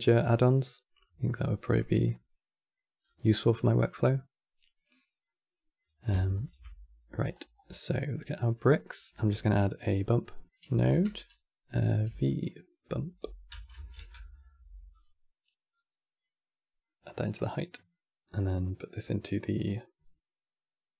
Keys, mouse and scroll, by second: 1.8 middle click, 2.7 scroll down 2, 3.0-6.0 middle drag, 6.0 ctrl+shift+click, 7.0-7.4 scroll up 4, 8.9 q, 10.4 x, 11.8 v, 15.4 click, 16.5 middle click, 17.2 scroll down 2, 17.4-18.7 middle drag, 18.7 click.